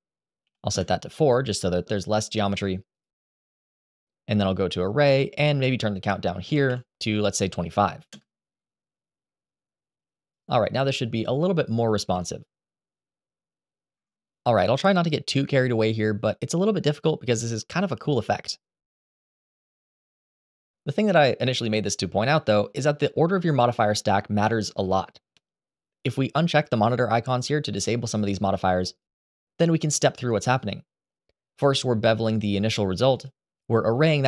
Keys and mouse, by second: 2.8 click, 3.6 click, 4.8-7.9 drag, 11.9 g, 13.7 Escape, 14.4 middle drag, 14.9 r, 16.0 KP_7, 16.4 g, 29.1 click, 30.0 click, 32.3 click, 32.9 click.